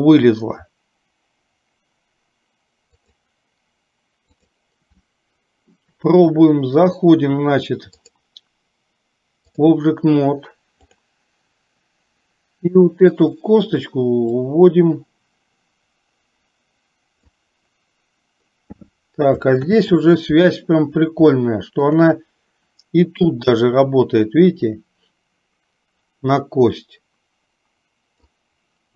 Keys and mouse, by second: 8.0-9.8 drag, 14.5-17.4 drag, 19.8 ctrl+z, 21.4 shift+middle click, 23.4-28.4 drag.